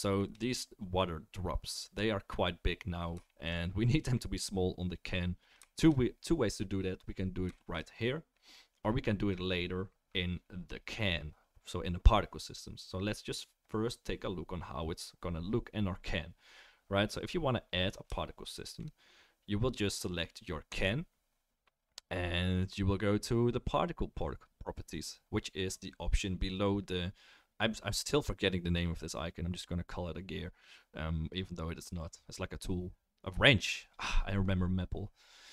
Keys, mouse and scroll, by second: 20.7 click, 20.9-35.5 right drag.